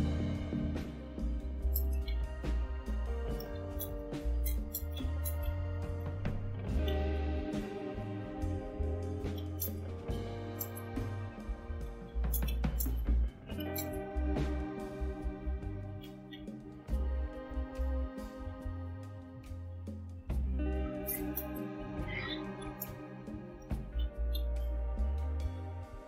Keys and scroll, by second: 1.1-7.3 typing, 7.6 Return, 9.0-17.4 typing, 20.2-25.7 typing.